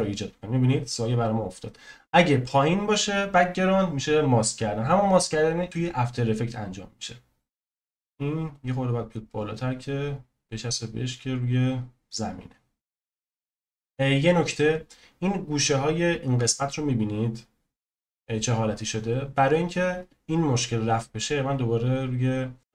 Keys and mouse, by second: 7.7 click, 13.4-15.7 drag, 19.0-20.5 drag.